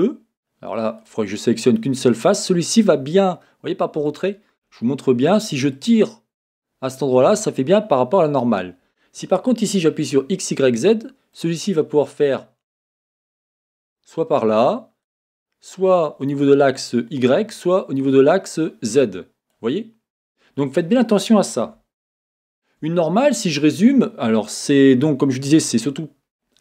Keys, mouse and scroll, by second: 0.0 middle click, 1.0 click, 2.2-5.7 middle drag, 4.1-5.3 scroll up 2, 5.3-5.7 scroll up 1, 5.7-10.1 drag, 13.8-23.2 drag, 22.0 z, 23.2-26.6 middle drag, 24.6-25.2 scroll up 2, 25.2-26.0 scroll down 2.